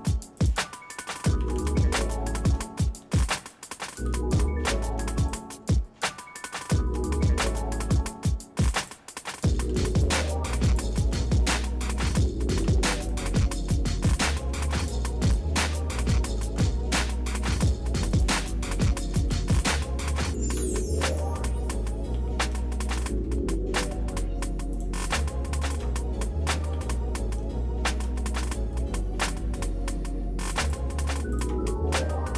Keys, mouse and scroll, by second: 0.4 shift+click, 1.4 ctrl+z, 2.1 shift+middle click, 2.6 middle click, 3.5 shift+click, 4.6 x, 5.7-6.8 shift+middle drag, 7.8 click, 8.7 shift+click, 9.5 ctrl+z, 9.9 shift+click, 10.7 shift+click, 12.5 x, 13.7 shift+middle click, 14.8 shift+middle click, 15.4 shift+middle click, 16.2 ctrl+Tab, 17.6 click, 18.1 shift+click, 19.3 f, 19.6 middle click, 20.2 shift+middle click, 20.7 click, 21.0 shift+click, 22.1 f, 22.6 shift+middle click, 23.0 middle click, 23.9-24.4 scroll up 2, 24.7 click, 25.6 alt+shift+click, 26.7 f, 27.0 scroll down 1, 27.5 shift+middle click, 28.1 middle click, 28.8 middle click, 30.6 click, 31.3 alt+shift+click.